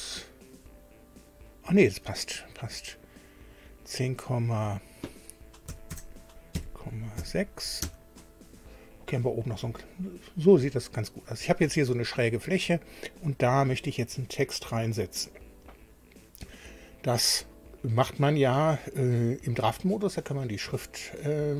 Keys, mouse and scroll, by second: 0.4 click, 3.0 click, 4.8 click, 5.7 KP_1, 5.9 KP_0, 6.7 KP_Decimal, 7.2 KP_6, 7.8 Tab, 12.9 click.